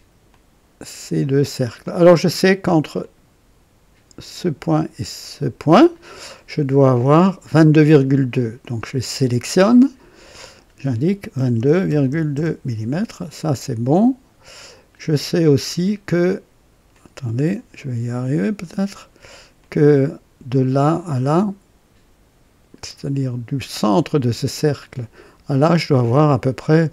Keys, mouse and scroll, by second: 0.2 click, 1.8 click, 2.9 click, 5.1 click, 10.1 click, 11.3 KP_2, 12.0 KP_2, 12.3 KP_Enter, 15.1-16.7 drag, 15.1 typing, 16.9 click, 19.5 click, 21.0-24.2 drag.